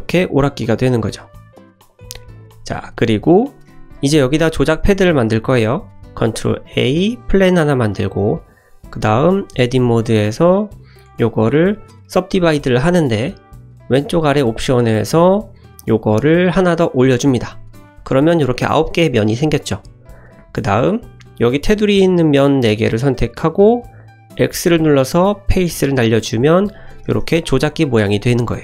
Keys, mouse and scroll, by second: 0.1 click, 1.9 click, 2.2 middle click, 2.7 `, 3.1 scroll up 1, 3.4 shift+middle drag, 11.0-14.0 right drag, 14.4 click, 15.3 click, 16.5 click, 20.1 click, 20.4 3, 21.0 click, 21.7 shift+click, 22.3 shift+click, 23.0 shift+click, 24.4 x, 28.3-28.6 scroll down 1.